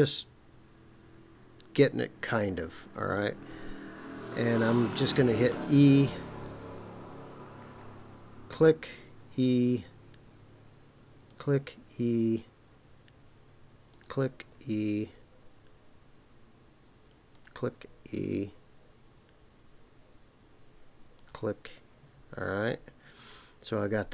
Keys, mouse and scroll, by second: 5.5 e, 8.5 click, 8.6-9.2 typing, 11.3 click, 11.6 e, 13.9 click, 14.4 e, 17.3 click, 17.7 e, 21.2 click.